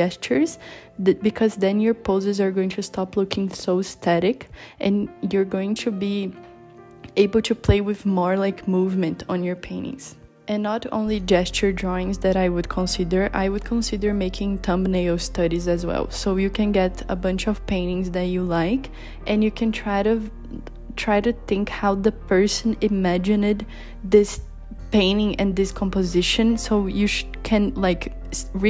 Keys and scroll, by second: 8.4 b, 9.5 i, 18.9 i, 26.0 b, 28.1 b.